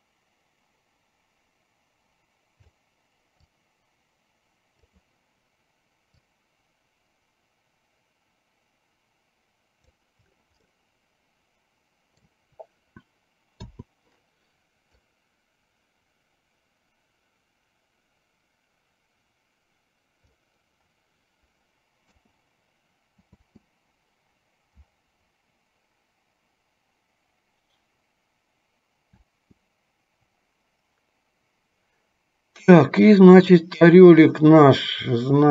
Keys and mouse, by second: 3.7-5.1 drag, 6.5-10.2 drag, 11.0-12.5 middle drag, 13.7 i, 15.2-20.5 drag, 22.2 KP_0, 23.7 space, 29.5 space, 33.3 click.